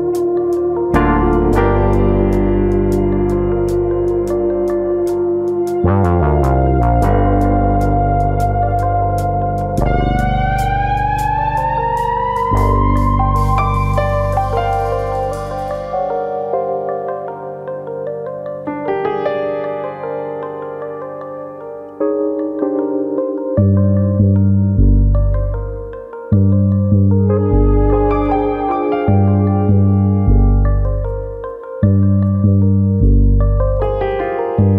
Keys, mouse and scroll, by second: 0.1 shift+middle click, 0.3 middle click, 0.7 s, 2.3 click, 2.7 click, 4.8 middle click, 5.0 scroll down 3, 5.3 middle click, 5.7 scroll up 1, 5.9 middle click, 6.6 click, 7.9 middle click, 8.5 middle click, 8.5-8.8 scroll down 2, 8.8-10.4 scroll up 9, 9.4 middle click, 11.4 3, 11.7 middle click, 12.6 middle click, 12.6 alt+click, 13.5 click, 16.2 ctrl+KP_Add, 17.4 click, 19.0 2, 19.3 alt+click, 20.0 click, 22.5 middle click, 23.1 alt+click, 24.0 click, 24.9 middle click, 25.4 click, 25.9 shift+click, 26.2 middle click, 26.8 click, 27.8 middle click, 28.1 middle click, 28.5-29.3 scroll down 5, 28.8 Tab, 29.3 middle click, 30.2 scroll up 1, 31.0 scroll up 2, 31.1 middle click, 31.4-32.0 scroll down 7, 32.0 shift+middle click, 32.2 middle click, 32.5 click, 32.7 middle click, 34.0 scroll up 2, 34.3 click.